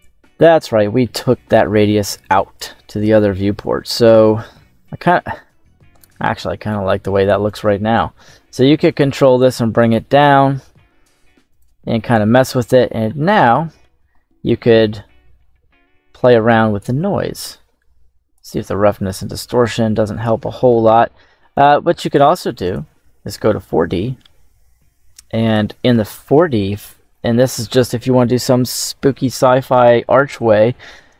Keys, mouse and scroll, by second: 0.6 middle click, 2.1 click, 7.4 click, 8.7 click, 9.1 click, 9.7 click, 11.4 click, 12.3 middle click, 12.9-13.7 scroll up 4, 13.4 middle click, 14.3-16.7 drag, 17.2-18.3 drag, 18.8-20.2 drag, 20.3 middle click, 21.4-22.6 drag, 23.6 middle click, 25.3-31.1 drag.